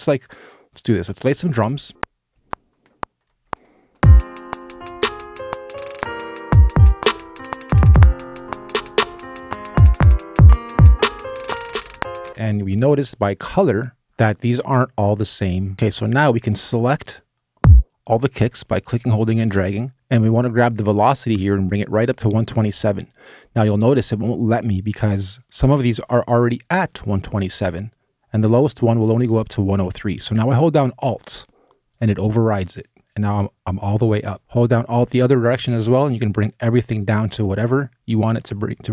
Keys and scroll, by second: 1.6 r, 1.9 space, 1.9 r, 12.0 space, 12.3 q.